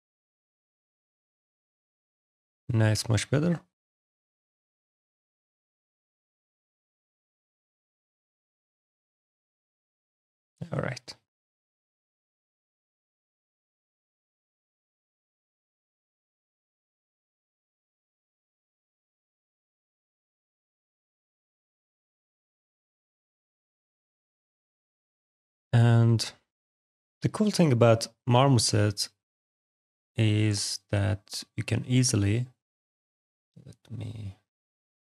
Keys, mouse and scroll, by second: 0.4-0.8 scroll, 1.4 alt+click, 2.0 right click, 3.0 click, 3.6 right click, 4.0 click, 4.6 alt+right click, 5.1 alt+click, 6.6 click, 8.8 click, 9.7 click, 10.7 middle click, 10.8 click, 11.1 click, 13.1 click, 13.7 click, 14.9 click, 16.2 click, 18.5 click, 19.4 alt+click, 21.7 alt+click, 21.9 alt+right click, 22.1 alt+click, 23.5 alt+click, 24.1 click, 28.7 click, 29.9 click, 30.4 alt+click, 32.1 alt+right click, 32.9 click.